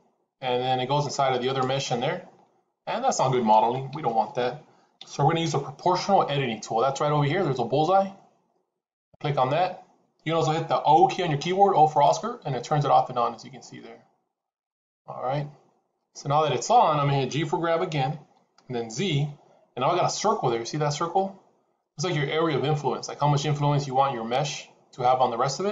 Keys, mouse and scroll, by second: 1.6 middle click, 3.8 ctrl+z, 4.9 KP_3, 8.9 click, 11.3-13.7 typing, 18.1 g.